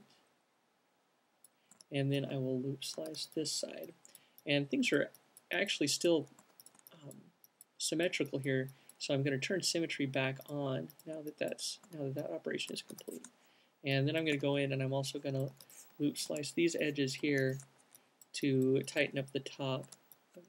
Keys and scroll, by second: 12.2 alt+q, 13.2-14.7 typing, 16.6-17.6 typing, 20.1 q.